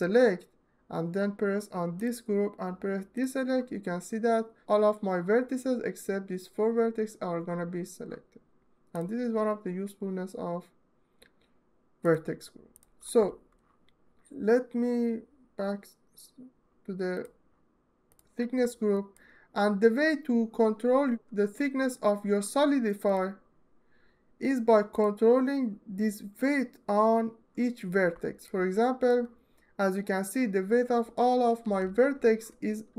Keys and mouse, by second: 1.6 click, 2.9-8.7 drag, 11.7-12.4 middle drag, 22.7 click, 28.2 alt+click, 31.3 l.